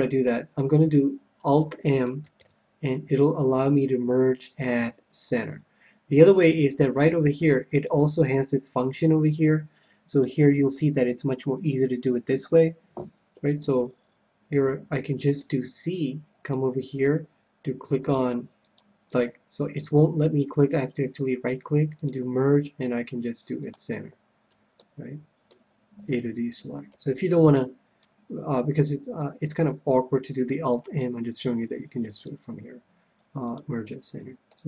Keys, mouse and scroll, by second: 2.3 alt+m, 6.9-9.9 drag, 14.5 a, 15.3 c, 16.6 c, 20.8-22.8 right drag, 21.9-23.7 drag, 24.8-26.6 middle drag, 26.0 a, 26.9 c, 30.9-32.7 right drag, 32.2-33.8 drag, 34.4-34.6 middle drag.